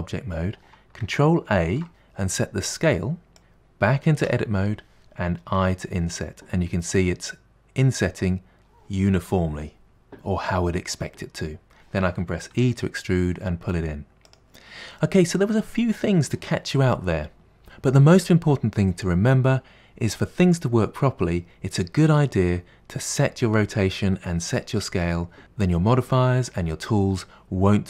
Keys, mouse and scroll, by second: 1.7 ctrl+a, 4.2 Tab, 12.6 e, 15.0-17.5 middle drag.